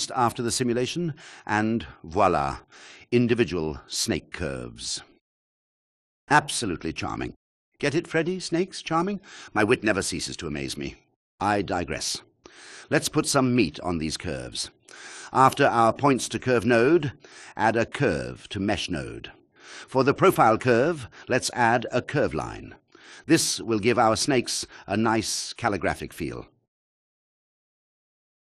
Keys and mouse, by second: 1.7 middle click, 3.3 middle click, 5.9 click, 10.4 right click, 12.2 middle click, 13.7 click, 15.2 g, 17.2 shift+BackSpace, 17.4 shift+a, 20.4-21.2 drag, 23.5 shift+a.